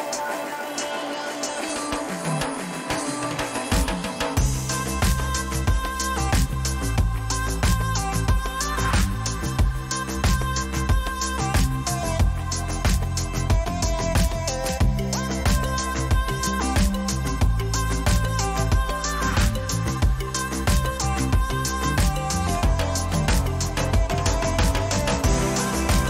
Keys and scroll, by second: 4.8 ctrl+a, 5.3 ctrl+c, 8.1 ctrl+v, 12.4 ctrl+t, 25.8 Return.